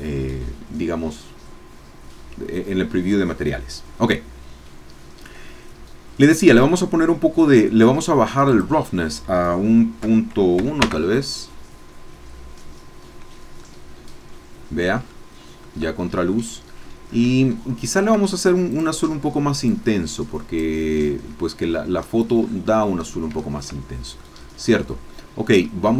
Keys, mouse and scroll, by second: 6.6-7.7 drag, 8.5 click, 10.0 KP_Decimal, 10.6 KP_1, 10.8 KP_Enter, 13.6 click, 14.5-15.8 middle drag, 16.3-17.4 middle drag, 17.5 shift+middle click, 18.7 click, 19.7-20.8 drag, 21.0 scroll down 1, 21.6-22.3 scroll up 1, 22.4 scroll up 1, 22.8-23.3 scroll down 1, 23.4 shift+click, 24.6-25.1 scroll down 2, 25.1 click.